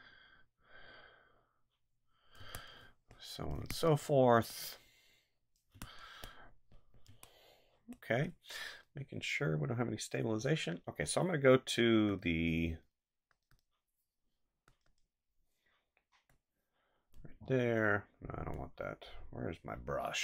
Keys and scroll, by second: 2.4 space, 5.7 space, 7.0 space.